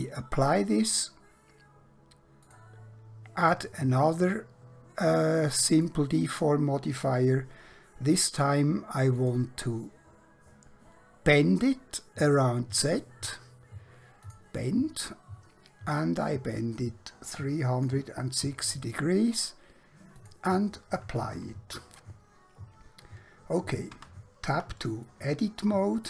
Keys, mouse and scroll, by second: 0.9 click, 5.8 click, 9.3 click, 12.2 click, 22.0 middle click, 23.9 Tab, 25.1 shift+middle click.